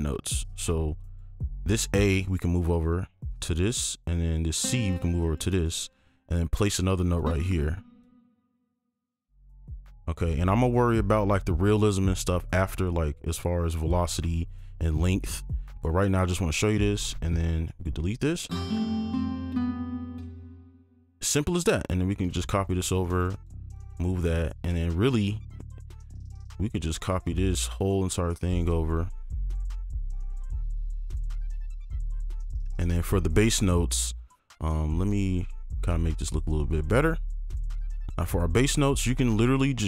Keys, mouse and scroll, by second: 0.8 right click, 1.0 click, 3.9 right click, 5.2 click, 5.6 right click, 6.5 click, 8.0 click, 9.3 click, 10.7 alt+click, 14.8 alt+click, 17.7 right click, 20.2 space, 21.8 space, 21.9 ctrl+click, 23.0 right click, 23.3 ctrl+click, 25.1 scroll down 1, 26.2 ctrl+click, 26.5 shift+click, 27.4 shift+click, 27.8 shift+click, 28.9-29.6 scroll down 1, 30.1 ctrl+click, 30.7 shift+click, 32.1 click, 32.1 scroll down 1, 32.4 right click, 32.7-33.6 scroll down 1, 33.6-34.2 scroll down 1, 34.2-35.4 scroll down 1, 35.7-37.9 scroll down 1, 37.9-39.8 scroll down 1.